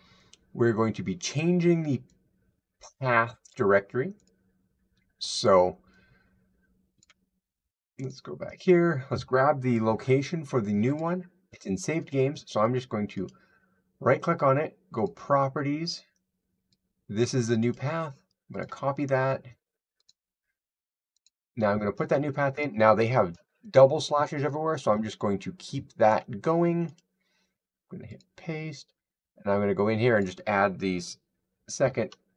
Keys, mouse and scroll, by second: 3.3 click, 4.1 click, 6.8 click, 7.9 click, 10.8 click, 13.1 right click, 14.8 click, 17.0 click, 17.6 click, 18.4 click, 18.4 middle click, 19.9 click, 21.2 click, 25.9 click, 26.8 right click, 28.0 click, 30.2 click.